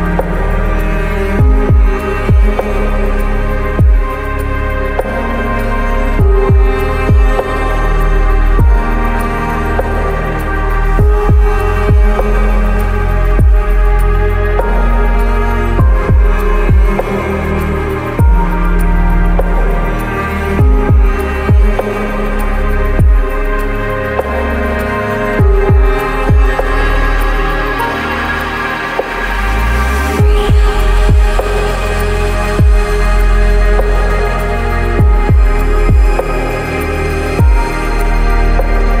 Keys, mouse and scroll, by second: 0.0 click, 0.6 click, 1.1 right click, 1.4 right click, 1.7 middle click, 1.9 right click, 2.0 middle click, 2.1 right click, 2.4 right click, 3.0 click, 3.1 middle click, 3.2 click, 4.0 click, 4.3 click, 4.5 ctrl+middle click, 5.1 click, 6.4 ctrl+middle click, 6.8 ctrl+middle click, 7.4 click, 8.0 ctrl+click, 8.7 click, 9.1 click, 9.4 click, 10.6 click, 10.9 middle click, 11.0 click, 11.5 middle click, 11.7 click, 12.1 middle click, 12.5 click, 12.9 click, 13.8 ctrl+middle click, 14.0 click, 14.6 click, 15.2 click, 17.1 shift+a, 17.5 click, 18.0 shift+s, 18.2 KP_0, 18.2 g, 18.4 click, 18.7 click, 19.4 g, 20.8 click, 20.8 KP_1, 24.2 click, 24.5 click, 24.9 click, 25.5 click, 25.9 click, 26.7 click, 26.7-30.4 typing, 27.1 middle click, 27.6 ctrl+shift+middle click, 28.0 shift+middle click, 28.3 shift+middle click, 29.1 click, 30.3 click, 30.8 click, 31.7-33.0 typing, 31.9 click, 32.2 click, 32.5 ctrl+click, 32.9 click, 33.1 click, 33.3 click, 33.9 click, 34.4 click, 34.6 click, 35.0 shift+g, 35.1 shift+s, 35.4 click, 35.7 click, 36.1 ctrl+z, 36.2 shift+click, 36.4 ctrl+z, 36.8 click, 37.3 ctrl+z, 38.1 scroll up 5, 38.5 scroll down 1, 38.7 scroll up 1, 38.9 middle click.